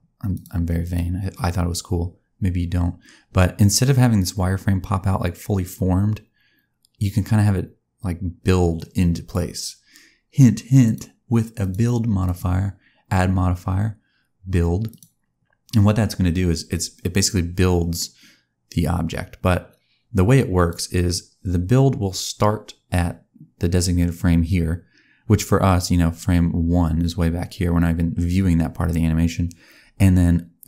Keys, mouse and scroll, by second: 0.2 click, 0.7 click, 4.1 click, 10.8 click, 11.5 click, 14.2 click, 17.8 click.